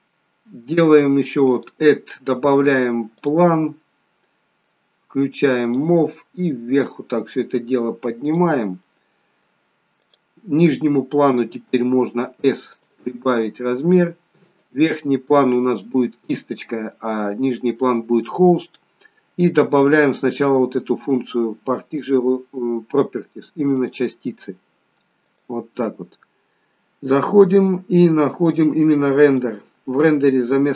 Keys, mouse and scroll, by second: 1.5 click, 3.8-5.6 scroll down 3, 4.2 middle click, 5.6 click, 6.8 click, 8.8 middle click, 10.0 click, 11.4 s, 13.2 middle click, 14.5 click, 23.7 click, 25.3 click, 27.5-28.0 scroll down 2, 28.3-29.2 scroll down 3, 29.2 click.